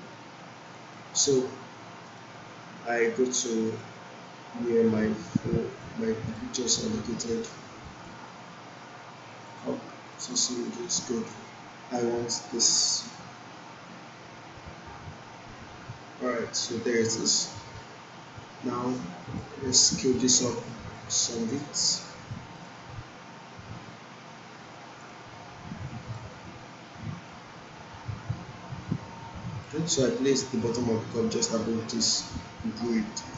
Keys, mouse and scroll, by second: 0.6 click, 17.2-21.5 drag.